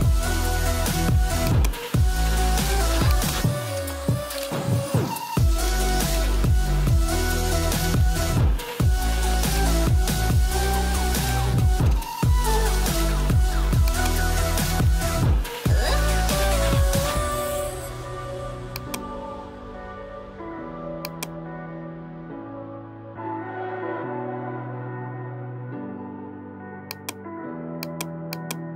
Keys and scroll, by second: 16.4 [, 24.4 Delete.